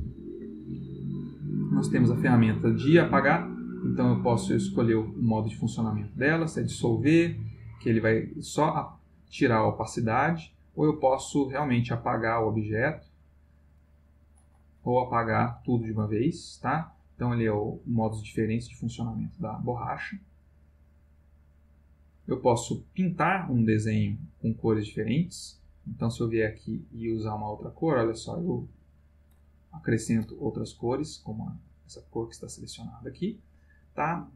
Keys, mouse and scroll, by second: 2.0 click, 5.8 click, 7.8-9.9 drag, 10.4 click, 10.9-12.7 drag, 13.2 click, 13.8-16.8 drag, 20.1 click, 22.5 click, 23.4 click, 23.9-25.3 drag, 26.2 click, 27.3 click, 28.4 click, 29.3 click, 31.7 click, 32.7 click.